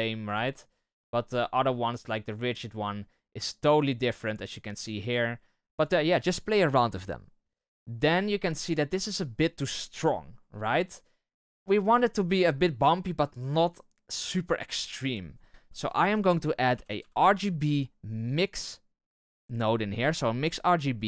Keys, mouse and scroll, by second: 10.5-19.0 middle drag.